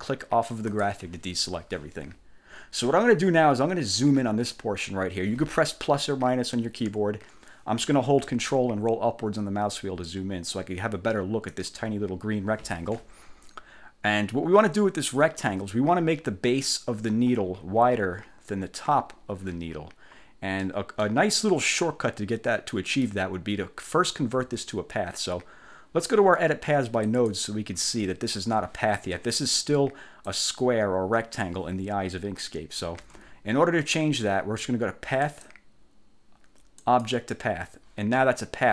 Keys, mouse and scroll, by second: 0.8 click, 6.7 =, 8.8-9.5 ctrl+scroll up 6, 10.2 ctrl+middle click, 11.6 click, 20.7 middle click, 27.1 click, 30.3-33.1 drag, 33.1 ctrl+z, 35.3 click, 36.9 click.